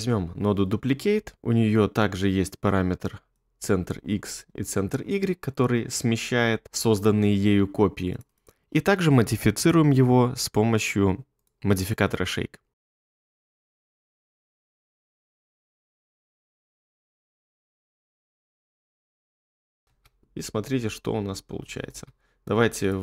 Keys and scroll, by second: 20.0 space, 21.9 space.